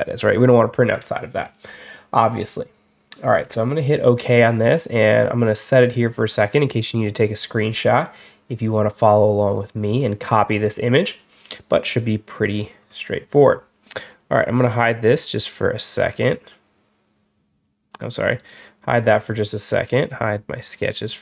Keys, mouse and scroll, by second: 12.3 middle click, 12.7 middle click, 13.3 middle click, 14.3 click, 17.8 click, 18.2 click, 18.9 click, 20.5 click, 20.9 click.